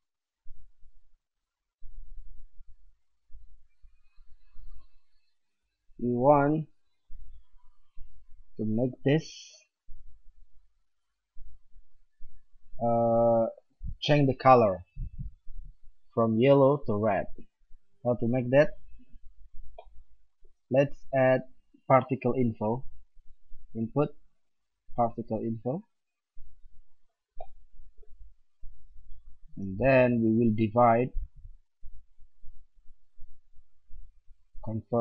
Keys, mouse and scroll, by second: 1.6 click, 21.0 shift+a, 28.5-30.4 drag, 29.4 shift+a.